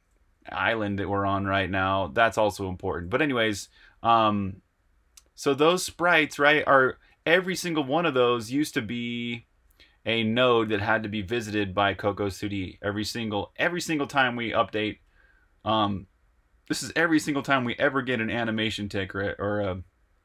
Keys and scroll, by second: 0.0-3.0 typing, 4.0-5.3 typing, 6.0 super+q, 7.0 super+Tab.